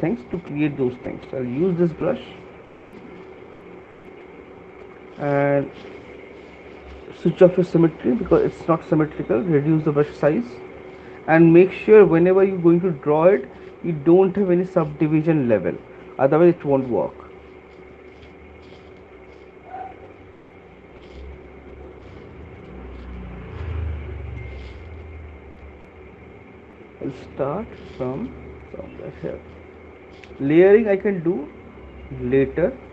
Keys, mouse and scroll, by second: 1.4 click, 3.0 alt+click, 5.8 alt+click, 7.8 x, 8.8 [, 9.0 [, 9.2 [, 11.4 alt+click, 11.6 x, 19.1 ], 19.3 ], 20.0 [, 23.3 alt+click, 23.7 click, 26.2 middle click, 26.2 click, 28.9 right click.